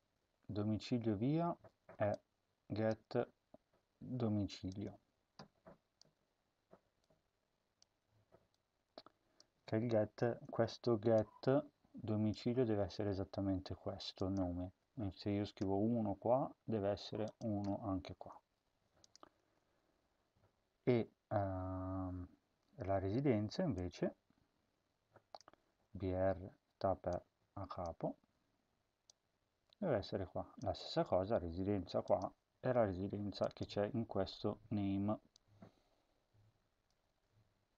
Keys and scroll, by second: 3.8 ctrl+c, 5.9 BackSpace, 7.8 BackSpace, 10.2 ctrl+v, 15.5 1, 17.5 1, 18.5 ctrl+z, 19.3 ctrl+z, 25.4 ctrl+c, 28.1 ctrl+v, 30.5 ctrl+v, 37.0 ctrl+c.